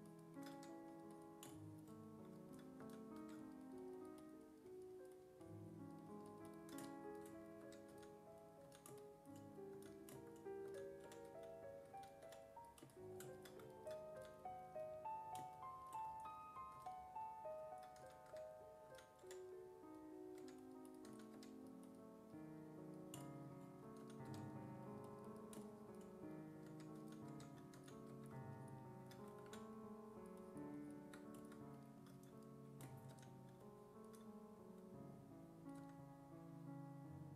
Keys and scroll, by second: 2.8 s, 3.2 1, 7.7 1, 7.9 s, 8.7 s, 9.8-12.3 typing, 14.2 s, 16.8 s, 18.0 s, 18.3 1, 18.9 s, 19.3 5, 20.4-21.9 typing, 23.8-24.8 typing, 26.5-28.6 typing, 29.5 ctrl+z, 33.2 w, 35.8 w.